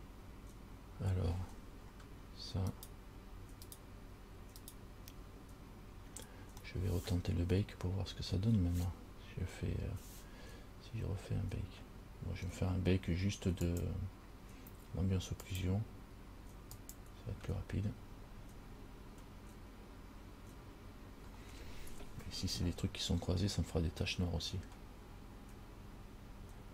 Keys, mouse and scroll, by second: 2.9 right click, 3.9 right click, 4.8 right click, 6.8 middle click, 13.9 click, 16.9 click.